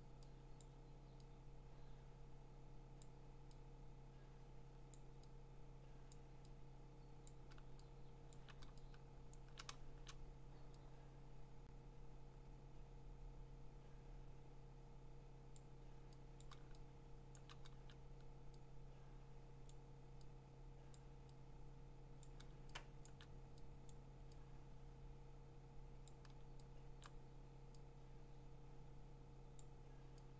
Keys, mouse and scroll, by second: 0.6 click, 3.0 click, 4.9 click, 6.2 click, 7.3 click, 8.1 click, 8.2 click, 8.4 click, 8.7 click, 9.3 click, 9.6 click, 9.8 click, 15.5 click, 16.4 click, 17.3 click, 19.7 click, 20.9 click, 22.2 click, 23.0 click, 23.1 click, 23.2 click, 23.9 click, 26.1 click, 26.9 click, 27.0 click, 29.6 click.